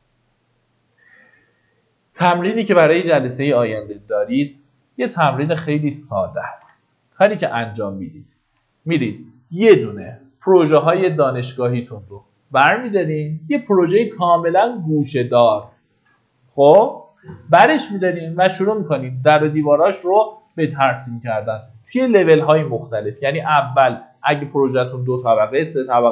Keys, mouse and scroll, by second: 3.7-4.2 scroll down 1, 5.0 click, 6.9 Delete, 8.8-9.8 drag, 20.5 middle click, 20.9-21.8 typing, 23.8 click, 24.4-25.7 scroll down 1, 25.7-26.1 middle drag.